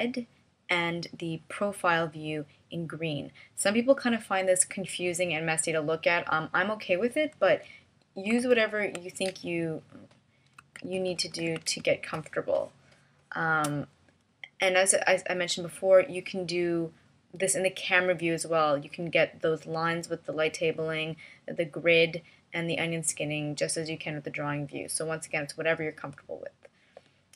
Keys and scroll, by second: 9.3 super+=.